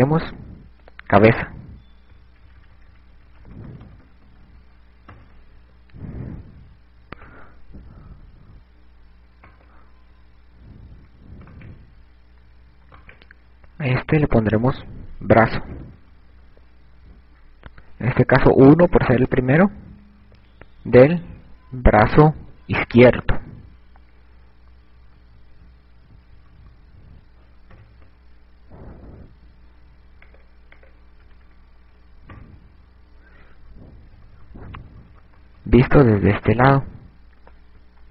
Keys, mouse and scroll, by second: 0.3 click, 7.8 right click, 10.4 right click, 11.9 a, 12.5 right click, 13.8 right click, 15.5 click, 29.6 click, 33.5 KP_4, 34.8-36.8 typing.